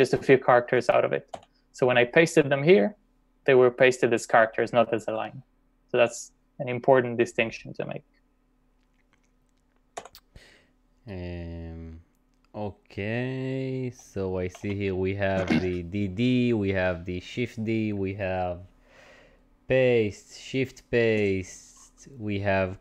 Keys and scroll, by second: 1.4 j, 10.0 typing, 14.0-15.0 typing.